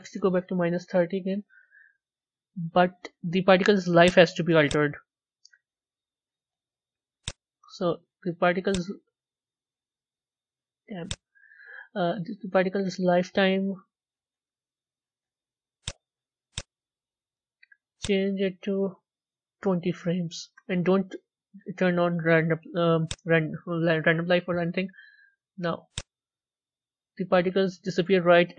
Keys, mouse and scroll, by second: 3.9 click, 4.4-5.9 drag, 5.9-7.1 middle drag, 7.1 click, 8.6 click, 10.9 click, 12.3-13.3 scroll up 7, 14.9 z, 16.4-26.0 drag, 26.5 scroll up 2, 26.9-28.4 middle drag, 28.4-28.5 scroll down 1.